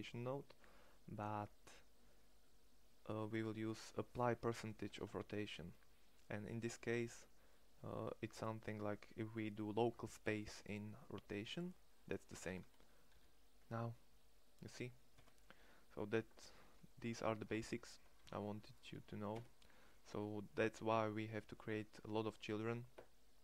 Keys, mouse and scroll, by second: 4.5 ctrl+Tab, 12.0 right click, 12.8 r, 16.2 click, 17.1 ctrl+Tab, 17.8 x, 18.9 1, 21.2-23.4 middle drag.